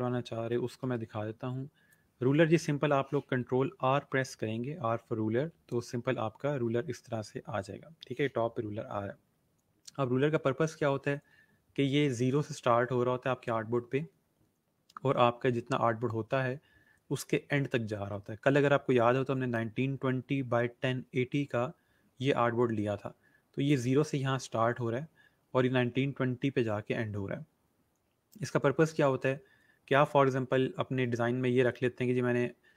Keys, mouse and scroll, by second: 0.6 click, 0.9 space, 2.6 ctrl+r, 5.6 r.